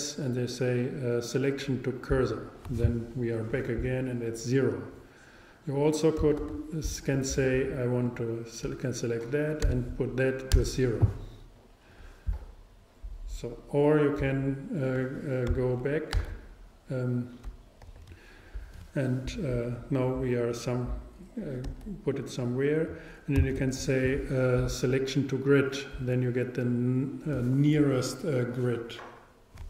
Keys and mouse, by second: 1.8 shift+s, 6.4 super+z, 8.1-10.1 drag, 16.2 super+g, 17.8 z, 21.7 g, 22.4-24.2 drag, 23.4 shift+s.